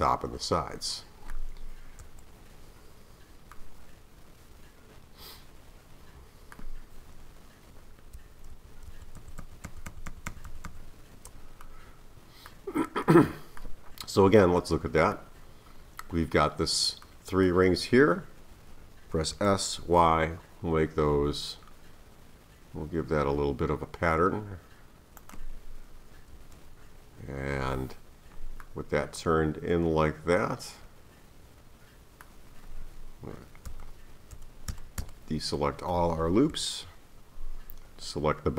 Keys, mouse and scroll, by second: 2.0 KP_1, 3.5-6.6 middle drag, 8.5-10.7 typing, 11.6-19.3 middle drag, 19.3 s, 26.3 KP_1, 28.6-31.7 middle drag, 33.7 a, 34.3 a, 34.7 a, 35.0 a, 36.5 KP_1, 37.5-38.5 scroll up 1.